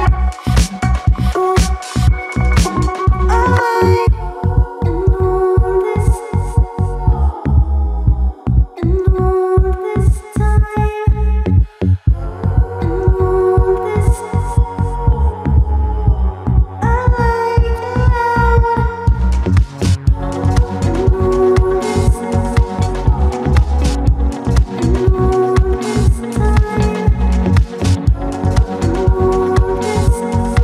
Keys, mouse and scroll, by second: 0.0 shift+click, 0.5 alt+click, 1.4 alt+middle click, 1.6 alt+right click, 1.7 alt+click, 2.5 alt+click, 3.5 click, 4.4 a, 4.5 a, 4.8 `, 5.1-5.4 scroll up 2, 5.4 click, 5.9 click, 6.3 click, 6.7 alt+right click, 6.9 alt+middle click, 7.0 alt+right click, 7.2 alt+middle click, 7.5 click, 8.3 alt+click, 8.7 `, 9.6 shift+click, 10.1 shift+click, 10.5 shift+click, 10.8 alt+middle click, 11.2 shift+click, 11.9 alt+middle click, 12.5 alt+click, 15.8 click, 16.5 click, 18.1 Tab, 18.6 click, 18.7 drag, 18.8 click, 19.0 click, 19.1 alt+click, 20.2 `, 20.7 click, 21.3 scroll down 1, 21.7 click, 22.5 click, 23.1 click, 23.7 click, 24.2 click, 25.5 click, 26.6 click, 27.5 alt+click, 28.0 alt+right click, 28.1 alt+middle click, 28.4 click, 28.9 click, 29.1 click, 29.6-30.3 ctrl+z.